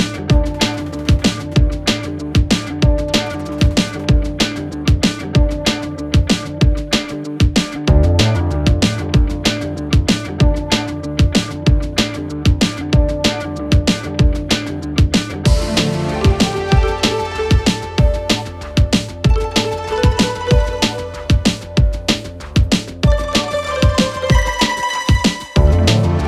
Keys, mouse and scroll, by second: 0.0-0.6 scroll down 1, 0.6 click, 4.2 click, 5.3 click, 7.8 Return, 10.2 Return, 11.9-13.1 click, 13.7 space, 16.8 space, 17.8-18.6 click, 20.3 click, 21.8 click, 25.4-26.2 click.